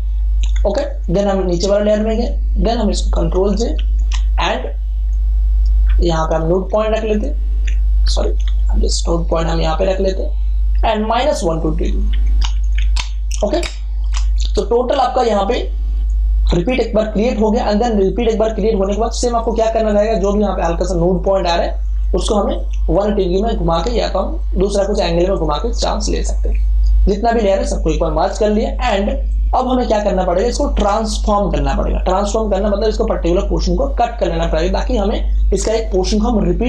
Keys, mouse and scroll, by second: 2.1 click, 3.2 ctrl+j, 3.7 ctrl+t, 5.0-8.0 drag, 8.0 ctrl+t, 8.9-11.2 alt+drag, 12.0 KP_Subtract, 14.0 Return, 15.8 space, 16.0-19.1 ctrl+drag, 21.8-23.4 ctrl+drag, 23.7 ctrl+click, 27.2 ctrl+shift+e, 28.9 space, 29.2 ctrl+click.